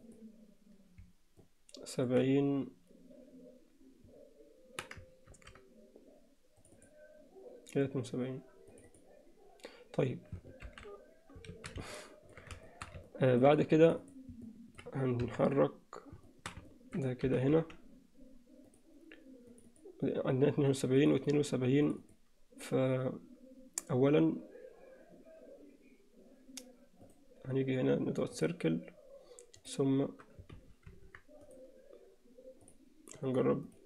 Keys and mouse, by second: 0.0 click, 1.4 alt+middle click, 5.3 ctrl+r, 8.7 click, 10.8 alt+h, 11.6 alt+a, 12.0 middle click, 12.7 alt+shift+middle click, 13.1 ctrl+middle click, 14.0 click, 14.5 alt+middle click, 15.2 KP_1, 16.3 shift+middle click, 16.7 ctrl+middle click, 17.3 g, 19.7 click, 21.2 click, 21.9 click, 22.1 click, 27.2-28.6 right drag, 29.6 click, 30.7 ctrl+z, 31.0 ctrl+z, 31.4-32.8 right drag, 33.7 click.